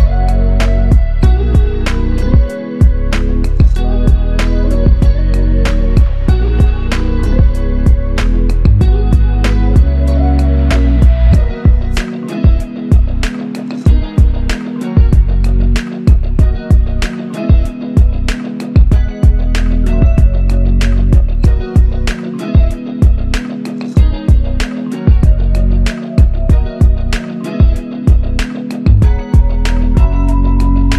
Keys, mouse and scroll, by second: 3.0 alt+shift+click, 3.9 alt+click, 5.5 double click, 8.8 alt+click, 10.8 double click, 14.2 alt+click, 17.1 double click, 19.9 alt+click, 21.0 double click, 23.6 f, 24.6 alt+click, 27.4 alt+click, 28.5 double click.